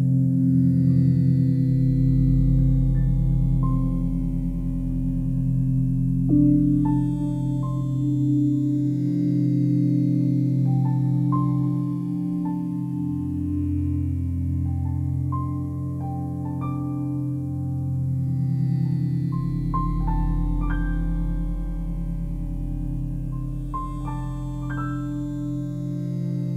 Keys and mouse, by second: 1.0 click, 1.7 click, 2.7 alt+click, 4.2 click, 5.7 click, 6.5 typing, 6.6 alt+click, 7.5 click, 8.8 alt+click, 9.9 click, 10.2 click, 11.1 ctrl+alt+click, 12.4 click, 13.4 click, 13.4 typing, 14.4-16.0 alt+drag, 15.8-16.5 typing, 16.9-18.3 drag, 18.4 shift+click, 19.4 typing, 20.3-22.1 drag, 22.2 typing, 22.8 Escape, 24.3 j, 25.3 click, 26.4 shift+click.